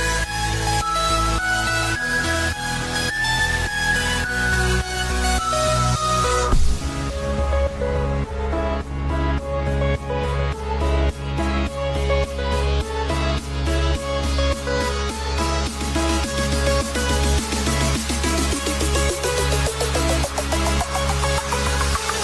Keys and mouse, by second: 0.3 click, 1.0 space, 11.7 click, 13.2 click, 16.5 click, 17.0 click, 17.0 space.